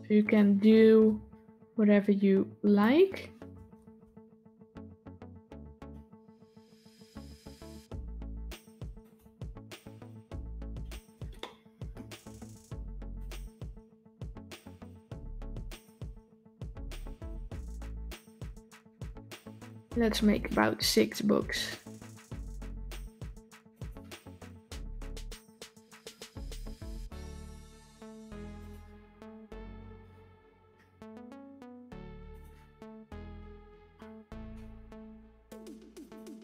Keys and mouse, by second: 0.5 r, 3.7 shift+d, 11.3-11.8 shift+middle drag, 12.0 s, 13.3 s, 16.8 shift+d, 20.8 r, 24.2 s, 26.6 shift+d, 28.9 r, 32.6 s.